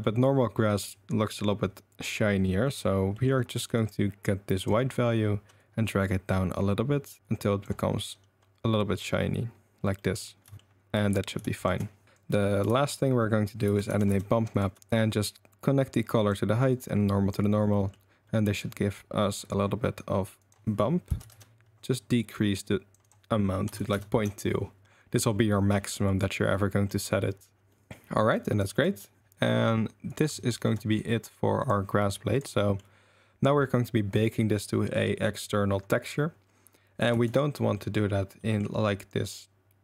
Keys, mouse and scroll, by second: 0.0 middle click, 3.1 middle click, 4.6 click, 8.0-9.0 drag, 10.0 drag, 11.2 click, 11.6 ctrl+shift+click, 12.0 click, 12.8 shift+a, 14.9 click, 15.0-16.3 drag, 16.8-17.3 drag, 17.7 drag, 18.2 drag, 20.4 click, 22.5 click, 23.0 click, 25.1 middle click, 25.7-26.1 middle drag, 26.5-26.8 middle drag, 27.7 middle drag, 28.3 ctrl+s, 28.4 drag, 28.7 drag, 30.4 shift+middle drag, 31.7-32.4 drag, 32.6 middle click, 37.1 Tab, 37.9 middle click, 38.4 middle click.